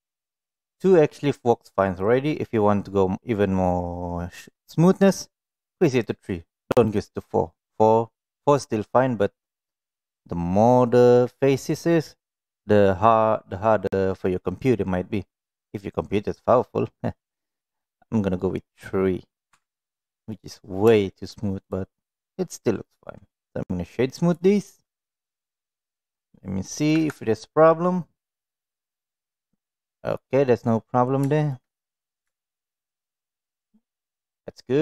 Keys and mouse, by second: 0.4 click, 5.9 drag, 6.8 click, 17.7 click, 19.0 middle click, 19.5 Tab, 19.7-20.3 middle drag, 21.1 shift+middle click, 22.5 right click, 25.0-26.2 middle drag, 26.9 KP_1, 28.4-30.1 middle drag, 32.4 shift+middle drag, 34.5 middle drag.